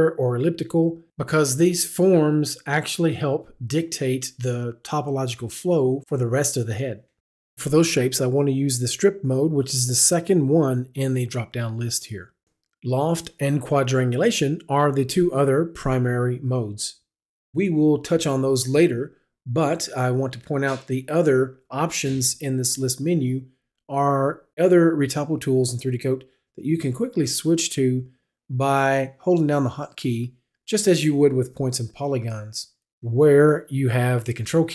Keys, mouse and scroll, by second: 8.6 click, 32.0 click.